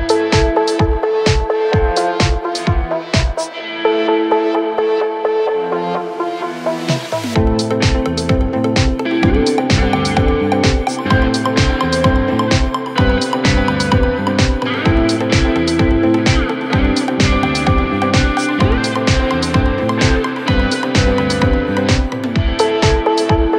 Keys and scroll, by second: 0.7 3, 12.1 ctrl+d, 12.4 Escape, 13.3 Escape, 20.7 \, 21.3 ].